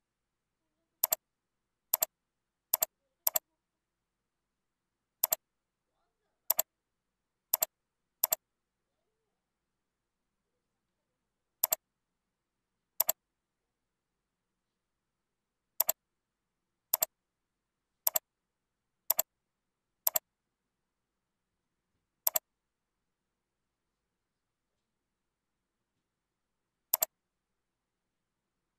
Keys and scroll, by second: 21.4 ctrl+b.